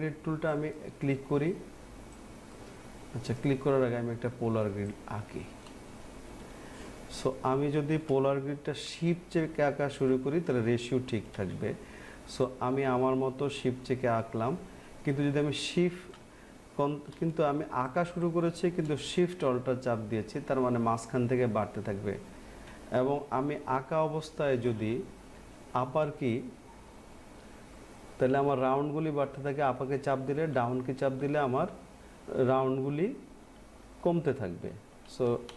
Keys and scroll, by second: 30.7 Down, 32.9 Down, 33.6 Down, 34.3 Down.